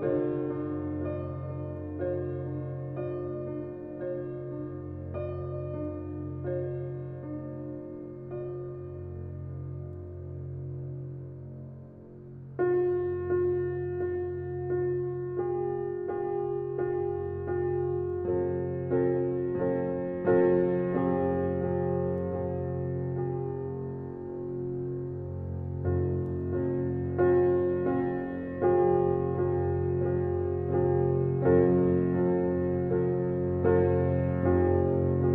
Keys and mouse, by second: 1.0 click, 1.8-3.4 drag, 3.4-4.8 typing, 5.5-6.9 drag, 6.9-7.8 typing, 10.7 ctrl+alt+click, 11.6 click, 12.5 click, 14.1 click, 15.5 click, 16.5 Delete, 17.7 click, 18.1 click, 19.6 click, 20.2 click, 21.3 Delete, 25.8 click, 26.3 click, 27.6 ctrl+z, 28.3-29.7 drag, 29.5 ctrl+z, 30.3 click, 30.8 ctrl+z, 32.5-33.8 drag, 34.3 click.